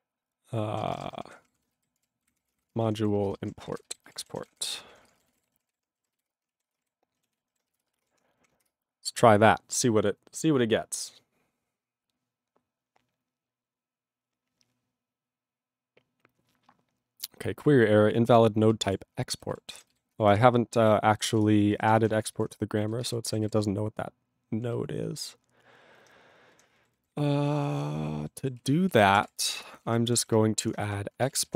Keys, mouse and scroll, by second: 0.0-0.1 typing, 0.7 ctrl+a, 0.8 ctrl+space, 0.9 ctrl+n, 1.2 alt+w, 1.3 ctrl+p, 1.4 ctrl+y, 1.4 ctrl+p, 1.5 ctrl+e, 1.8 alt+b, 1.9 alt+d, 2.0-5.1 typing, 3.1 ctrl+space, 3.2 ctrl+n, 3.6 alt+w, 3.7 ctrl+y, 5.1 ctrl+e, 5.1 ctrl+n, 5.3 ctrl+g, 5.7 ctrl+s, 6.3 Return, 6.6 ctrl+space, 6.7 ctrl+e, 6.8 ctrl+g, 7.3 ctrl+s, 7.8 Return, 19.0 Return, 19.5 ctrl+s, 20.4 ctrl+Return, 21.4 Return, 22.5 ctrl+Return, 22.8 ctrl+a, 22.9 ctrl+space, 23.0 ctrl+e, 23.0 ctrl+g, 23.4 ctrl+s, 23.5 ctrl+p, 24.0 ctrl+p, 24.7 ctrl+n, 25.2 ctrl+n, 28.6 ctrl+s, 28.8-31.5 typing, 30.0 ctrl+n, 30.1 ctrl+o, 30.1 Tab.